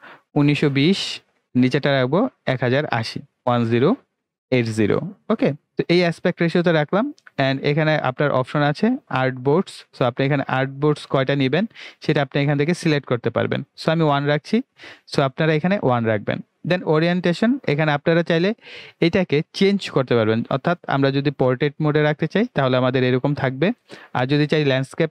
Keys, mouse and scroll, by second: 1.4 space, 5.9 click, 10.7 click, 21.7 click, 24.9 click.